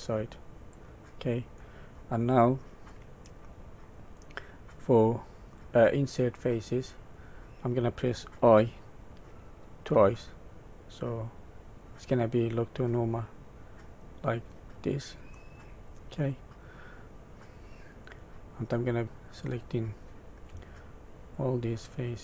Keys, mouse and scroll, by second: 0.6 click, 1.6 middle click, 15.3 middle click, 18.4 middle click, 19.2 click, 21.3 shift+click.